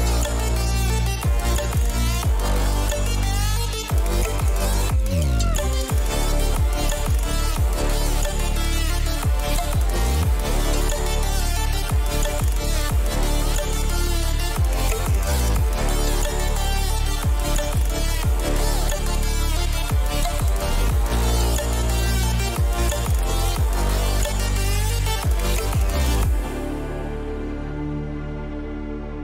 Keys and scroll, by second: 19.9 ctrl+g, 22.7-24.6 typing.